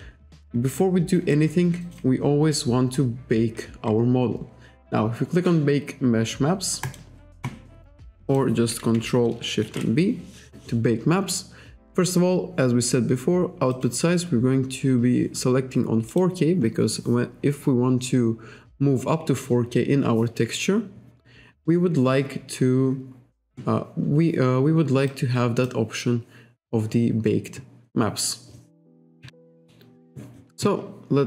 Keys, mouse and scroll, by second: 1.3 click, 2.7 scroll down 1, 3.0-3.4 scroll up 1, 3.5 scroll up 1, 3.8-4.2 scroll down 1, 6.9 click, 8.3 click, 9.7 ctrl+shift+b, 13.7 click, 16.1 click, 25.1 click, 29.3 KP_5.